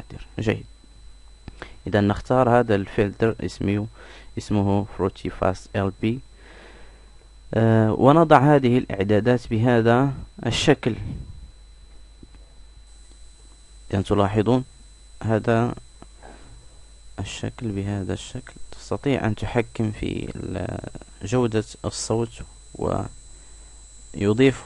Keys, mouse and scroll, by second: 9.8-11.4 drag.